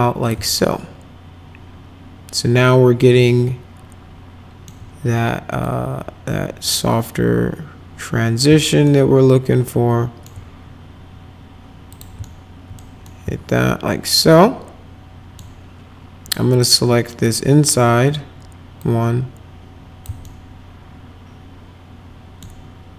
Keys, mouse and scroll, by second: 0.6-4.6 alt+middle drag, 5.6-8.4 drag, 8.8-10.2 alt+middle drag, 11.9 click, 12.2 alt+middle click, 13.0-15.3 alt+middle drag, 16.6 click, 17.2 click, 18.8-20.0 drag, 20.2-22.4 alt+middle drag.